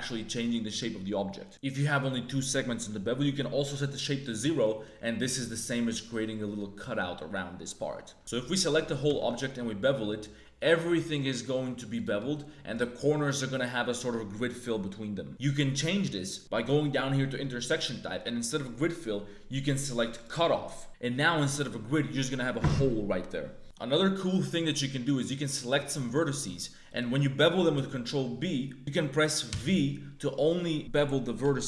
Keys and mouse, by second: 3.6 click, 4.7 middle click, 5.2 click, 7.3 middle click, 8.2 ctrl+z, 8.2 a, 9.0 ctrl+b, 12.1 middle click, 18.5-20.2 drag, 23.6 ctrl+z, 23.6 1, 23.7 click, 24.1 click, 25.6 click, 26.0 shift+click, 26.5 shift+click, 27.7 ctrl+b.